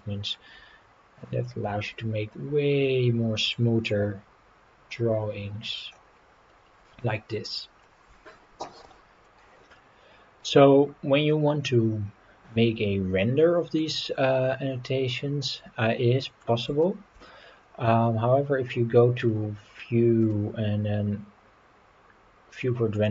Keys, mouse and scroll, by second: 1.4-6.0 drag, 6.5-6.9 scroll down 2, 6.9 middle click, 8.1 scroll down 1, 12.5-16.4 middle drag, 16.8 shift+middle click, 19.1 scroll up 1, 20.2-23.1 drag.